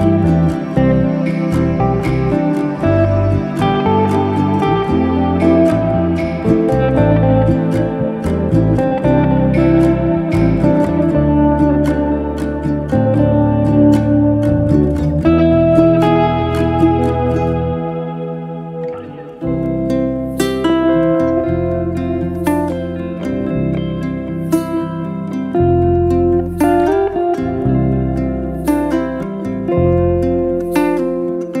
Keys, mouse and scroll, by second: 0.0 e, 4.4-5.7 middle drag, 5.7-6.2 scroll up 1, 6.2-6.9 scroll up 1, 6.9 i, 10.7 middle click, 11.6 e, 14.1 shift+d, 14.7 o, 15.0 p, 15.6 p, 16.4 click, 17.0 Tab, 17.2 click, 17.5 Tab, 17.8 middle drag, 18.0 click, 18.2-19.7 middle drag, 22.9-23.7 middle drag, 23.7 i, 25.2-26.3 middle drag, 26.3 e, 27.2-27.8 middle drag, 27.8 shift+s, 28.8 Tab, 29.0-29.3 middle drag, 29.3 shift+a, 30.4-31.6 middle drag.